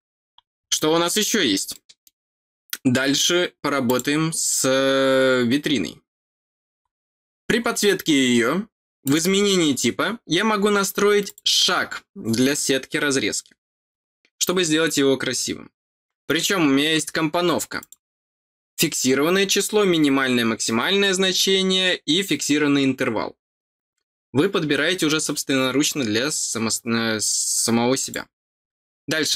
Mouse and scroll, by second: 0.7 middle click, 1.7 middle click, 3.8 click, 6.8 middle click, 9.0 click, 11.2 click, 17.7 click, 27.9 click.